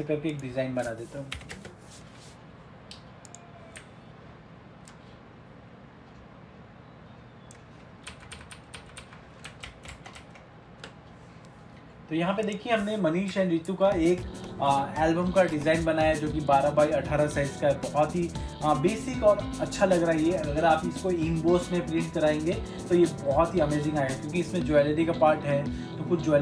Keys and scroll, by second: 9.8 ctrl+-, 10.0 ctrl+0, 10.3 ctrl+-.